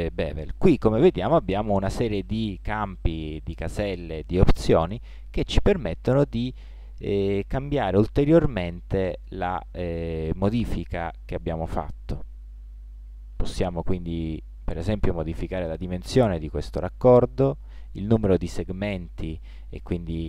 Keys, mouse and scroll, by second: 2.9-4.8 drag, 6.5-8.3 drag, 14.1-16.0 drag, 17.9-19.6 drag.